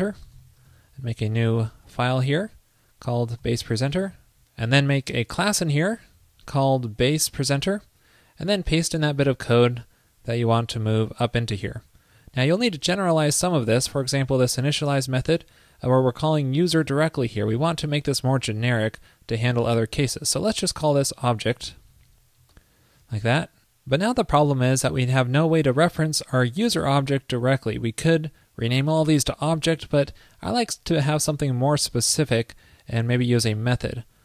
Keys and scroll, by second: 0.8 super+s, 9.2 super+v, 11.0 super+Up, 13.4 alt+Right, 13.4 alt+Right, 13.5 alt+Right, 14.7 alt+shift+Left, 20.9 alt+shift+Left, 20.9 super+c, 22.1 alt+Left, 22.6 alt+Left, 25.7 alt+super+Left.